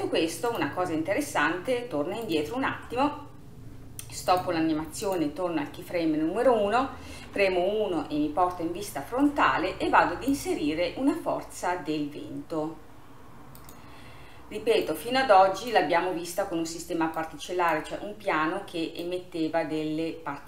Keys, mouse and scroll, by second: 0.5-7.3 drag, 7.3 KP_1, 10.4-12.6 drag, 14.9 click, 17.2-19.2 drag.